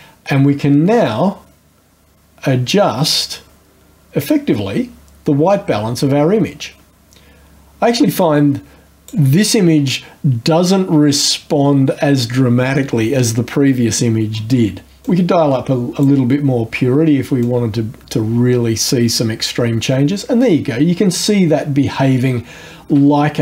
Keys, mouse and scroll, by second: 0.3-9.3 drag, 9.3-15.0 middle drag, 15.0-16.2 drag, 17.4-23.4 drag.